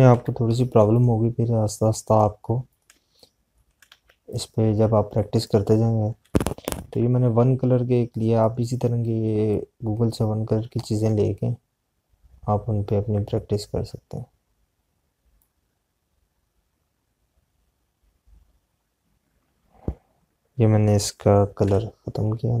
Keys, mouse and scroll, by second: 0.3 click, 4.8 z, 5.3 click, 7.9 p, 20.4 click.